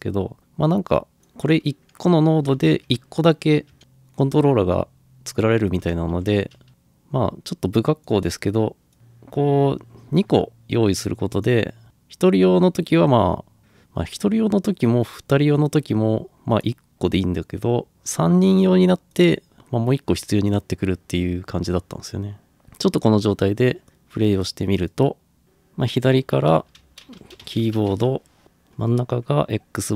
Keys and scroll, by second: 6.2 ctrl+v, 6.7 ctrl+v, 6.7 ctrl+c, 26.1-28.3 typing.